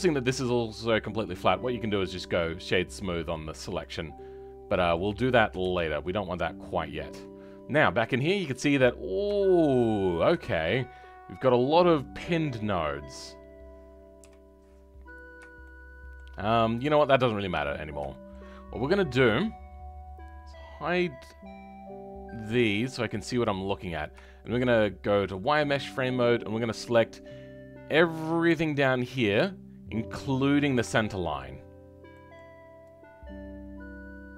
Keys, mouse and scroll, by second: 3.8 right click, 4.1-5.6 middle drag, 5.6 ctrl+z, 6.6 click, 14.2 KP_7, 15.6-17.6 shift+middle drag, 17.6-18.1 scroll up 4, 18.1-22.9 shift+middle drag, 22.9 click, 23.8-24.1 scroll up 2, 24.1-25.3 shift+middle drag, 25.3 click, 25.7-28.9 scroll up 4, 28.9 click, 31.0-34.3 shift+middle drag.